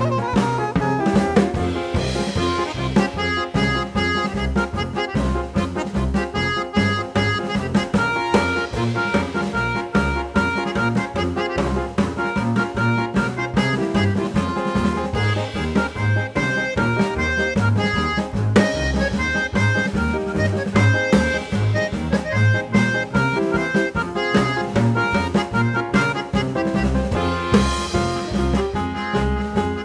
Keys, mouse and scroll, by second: 2.3 ctrl+alt+c, 2.8 click, 4.3 click, 5.6 click, 8.0 click, 9.2 click, 14.4 click, 16.3 click, 18.8 click, 19.4 click, 20.8 click, 23.4 click, 24.2 click, 25.4 click, 25.9 click, 26.6 click, 27.0 Tab, 27.8 click, 28.5 click, 29.2 click, 29.5 click.